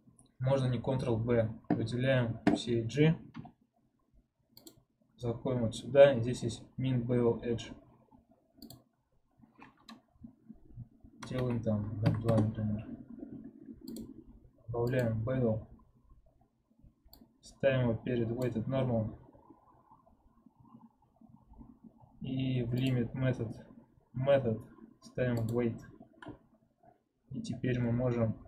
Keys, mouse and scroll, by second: 3.2 n, 4.4 click, 8.5-11.6 drag, 13.8-16.8 drag, 17.0-18.5 drag, 22.7-25.8 drag.